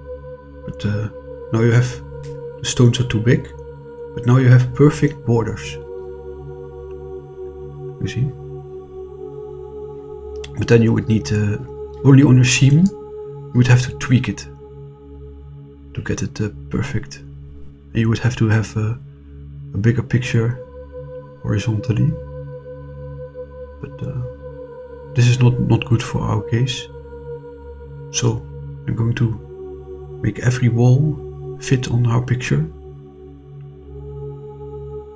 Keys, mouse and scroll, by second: 0.5 click, 1.4-4.3 middle drag, 6.8-10.1 middle drag, 10.4-11.5 middle drag, 14.9-15.4 middle drag, 20.4 click, 22.0 click, 24.4 click, 25.3 click, 26.2 click, 27.0 shift+click, 28.5 click, 29.0 click, 30.4 click.